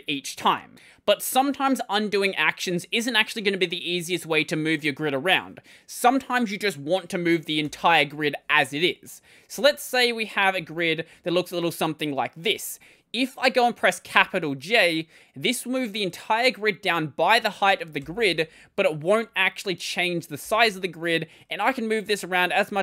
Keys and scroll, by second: 0.0-0.2 typing, 7.5 ctrl+;, 9.4-11.1 typing, 20.3-22.8 typing.